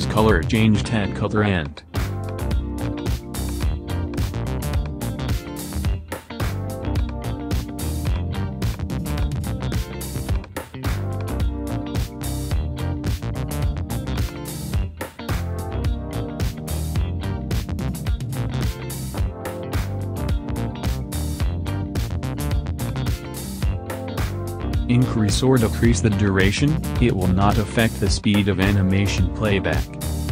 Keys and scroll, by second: 16.1 Home, 16.4 space, 19.3 space, 20.7 space.